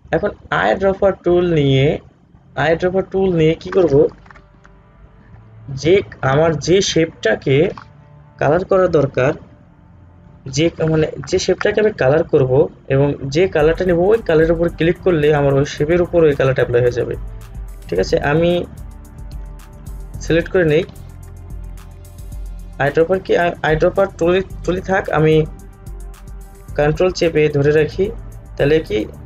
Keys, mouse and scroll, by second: 1.0 click.